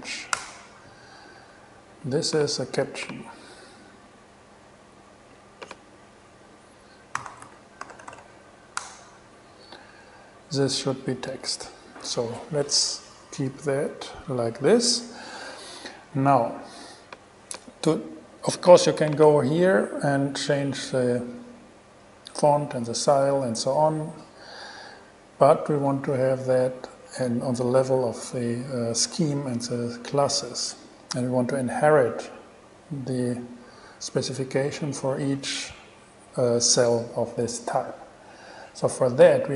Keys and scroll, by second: 0.0-0.5 typing, 0.6 Return, 7.1-8.8 typing, 9.0 Return.